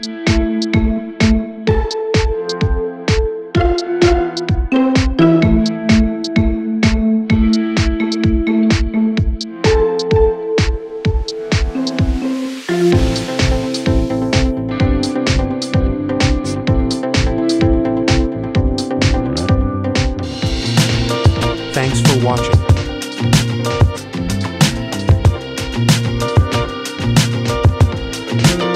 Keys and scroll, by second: 0.4-1.8 typing, 1.9 Tab, 4.2 3, 4.4 Tab, 8.2 9, 8.4 Tab, 8.8 Return, 9.9 g.